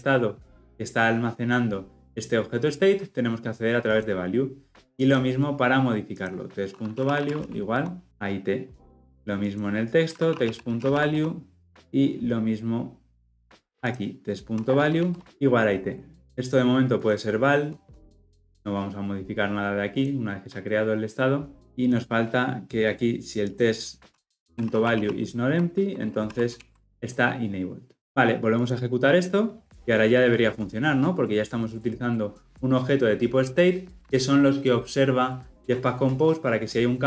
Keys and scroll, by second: 25.5 Escape, 26.3 ctrl+alt+l, 26.5 ctrl+alt+o, 28.6 shift+F10, 29.4 shift+F10.